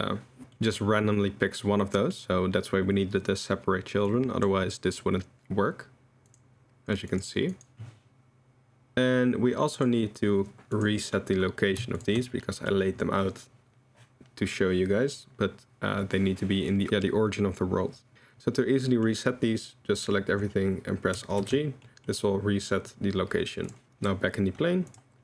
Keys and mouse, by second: 0.5 middle drag, 1.9 middle drag, 4.1 click, 6.3 click, 7.1 click, 7.5 click, 9.8 click, 10.7 click, 12.0 shift+click, 12.4 middle drag, 18.8 middle drag, 21.4 alt+g, 21.8 middle click.